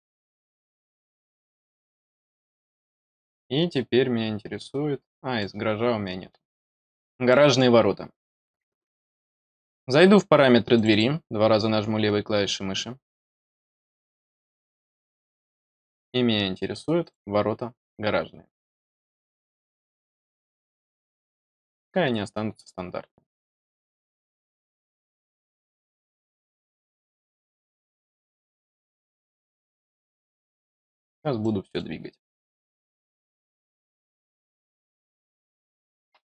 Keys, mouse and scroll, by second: 0.0 click, 1.3 click, 2.3-2.6 scroll down 3, 2.9-5.3 middle drag, 5.9-6.5 scroll down 1, 6.5 middle click, 6.8 scroll up 1, 7.2 middle click, 9.0 click, 10.7 click, 16.9 click, 19.6 click, 21.0 click, 21.8-22.5 scroll up 1, 22.5 scroll up 1, 29.6 click, 30.8-31.3 scroll down 1, 31.3 middle click, 33.5 click, 34.4-34.8 scroll down 1, 34.8 middle click.